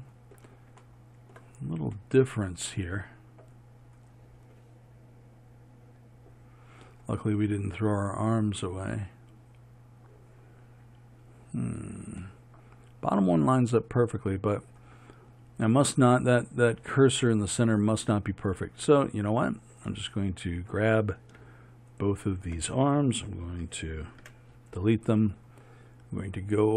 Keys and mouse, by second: 13.1-19.0 middle drag, 19.0-24.9 right drag.